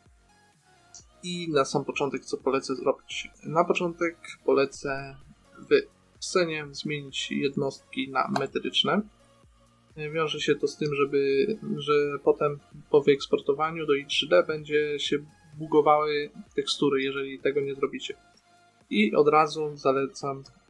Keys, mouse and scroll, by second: 5.2-10.3 drag, 10.4-13.0 middle drag.